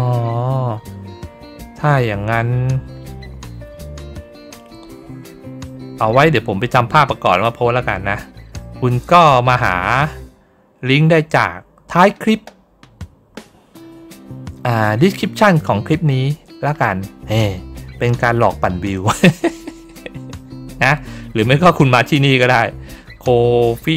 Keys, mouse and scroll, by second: 0.0 scroll down 1, 0.3-1.0 scroll up 1, 1.2 scroll down 1, 2.3 scroll up 2, 16.4 scroll down 2, 20.7 scroll up 2, 21.2-22.1 scroll up 4.